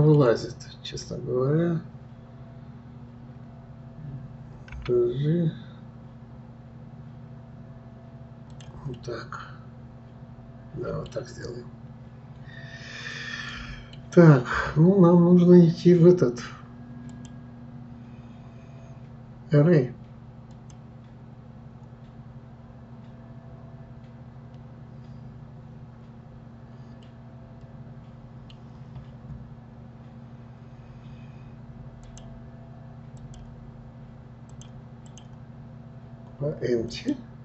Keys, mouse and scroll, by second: 9.0-12.0 middle drag, 13.1-16.1 middle drag, 17.1-20.1 drag, 26.5-27.0 scroll down 1, 27.0-28.7 middle drag, 28.7-31.7 scroll up 1, 32.0 click, 33.2 click, 34.5 click, 35.1-37.4 drag.